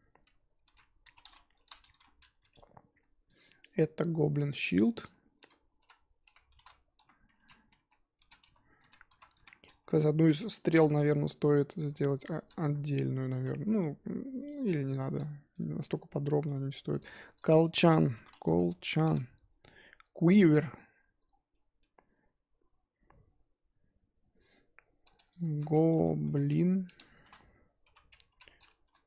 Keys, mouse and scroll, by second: 3.3 click, 3.6 click, 4.7-9.8 drag, 10.5 click, 10.8-11.7 scroll down 3, 11.7 click, 11.9-14.7 scroll up 3, 14.9 shift+middle click, 15.5 click, 16.5 click, 21.2 scroll down 3, 21.5-25.2 middle drag, 25.3-29.0 drag.